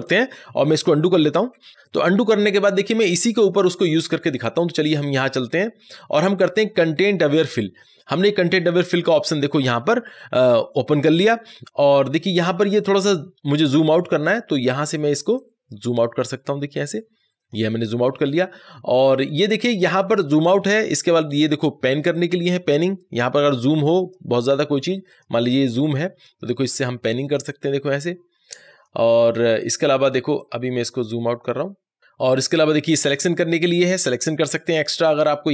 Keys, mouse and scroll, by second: 4.7 click, 7.3 click, 14.4-31.9 drag, 32.9 click.